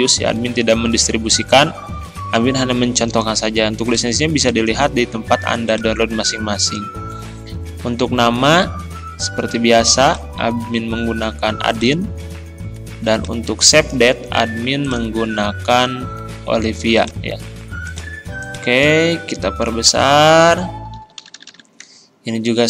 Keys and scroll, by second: 0.0 ctrl+], 0.5 ctrl+[, 19.9 ctrl+].